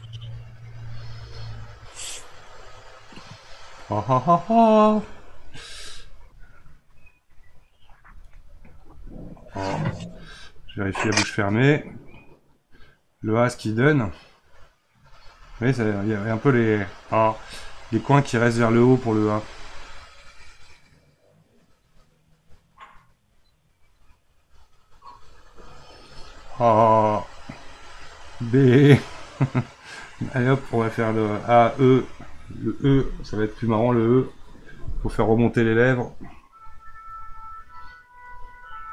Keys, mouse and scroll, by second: 2.4-5.5 middle drag, 6.7 click, 8.3-10.8 middle drag, 10.8-13.8 drag, 15.9-23.3 drag, 27.1-30.1 middle drag, 30.4-36.5 middle drag, 37.1 click.